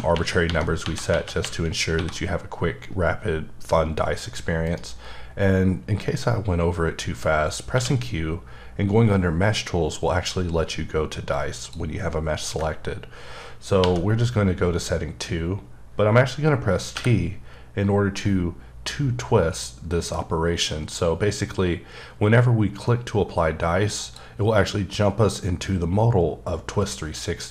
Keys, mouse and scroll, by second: 0.0-1.9 typing, 4.6 right click, 7.2-7.7 scroll down 1, 7.7 q, 11.3 click, 13.8 2, 19.0 t, 24.0 click, 24.9-25.2 scroll down 3, 25.9-26.9 scroll down 1, 26.9 scroll up 1.